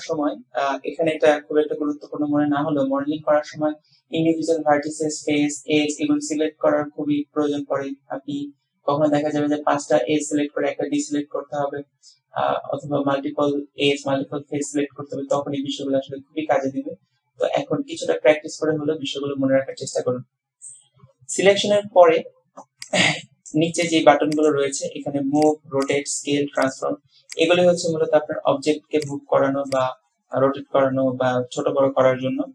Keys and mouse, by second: 22.9 click, 23.9 click, 24.4 click, 25.5 click, 25.9 click, 26.7 click, 27.4 click, 29.1 click, 29.8 click.